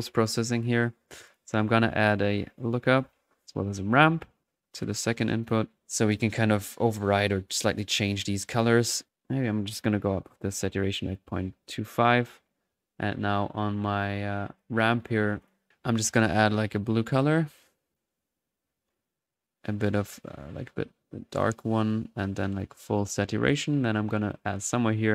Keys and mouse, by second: 1.3 click, 1.8-4.9 typing, 2.0 right drag, 2.4 click, 2.5 right click, 2.9 click, 3.7 right click, 4.8 drag, 5.5 drag, 5.7 middle click, 6.9-7.2 drag, 7.5 click, 8.0 click, 9.7 click, 12.1-12.4 drag, 17.6-18.1 drag, 19.6-21.5 drag, 21.9-22.7 drag, 24.3-25.1 drag.